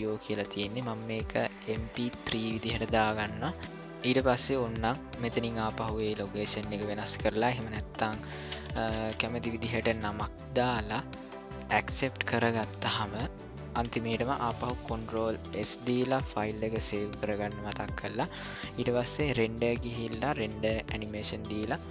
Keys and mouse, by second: 0.5-2.3 drag, 5.3 click, 16.1 ctrl+s, 19.3-21.9 drag.